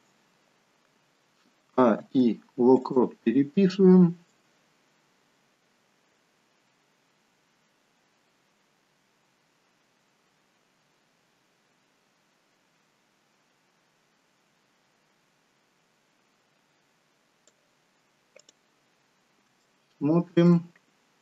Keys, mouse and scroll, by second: 1.7 a, 2.0 i, 4.4 click, 18.4 click, 19.7 shift+middle click.